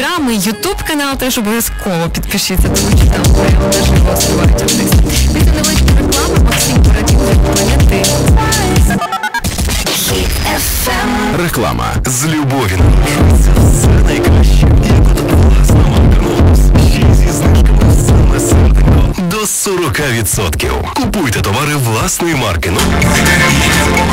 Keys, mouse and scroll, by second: 9.4 Page_Down, 19.1 Page_Down.